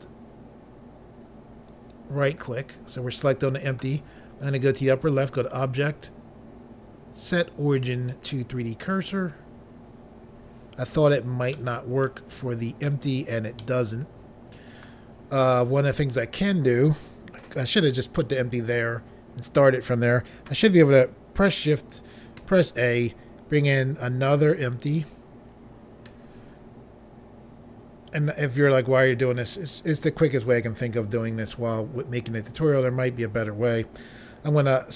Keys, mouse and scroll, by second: 1.8 shift+right click, 5.4 click, 8.9 click, 11.7 middle click, 12.4 scroll down 3, 13.7 middle click, 15.5 scroll up 2, 22.5 a, 24.8 click, 26.2 s, 29.5 click, 32.9 click.